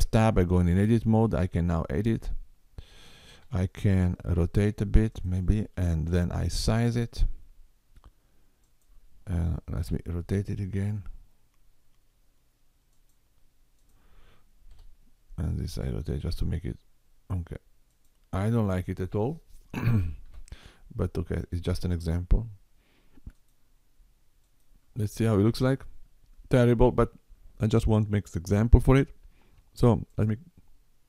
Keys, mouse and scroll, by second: 0.4 click, 3.4 r, 6.1 s, 9.7 r, 13.7 click, 14.7 r, 20.2 s, 24.4 click, 25.4 Tab, 30.0 click.